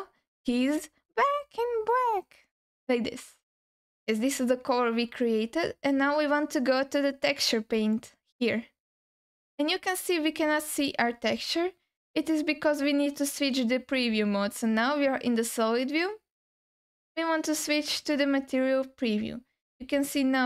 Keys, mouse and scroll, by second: 2.5-3.7 scroll down 3, 8.1 click, 9.7-11.9 scroll down 5, 18.0 click, 19.2-19.9 scroll up 4, 19.9 alt+middle click.